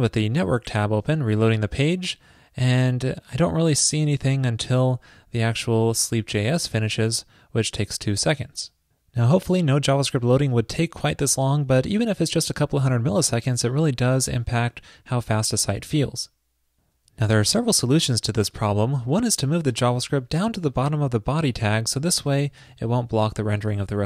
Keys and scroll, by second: 20.7 super+x, 22.7 super+v, 23.6 super+s.